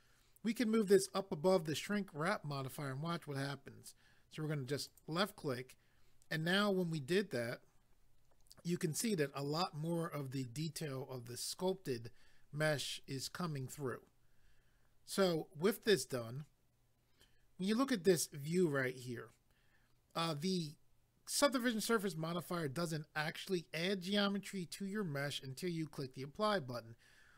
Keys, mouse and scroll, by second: 4.8 click.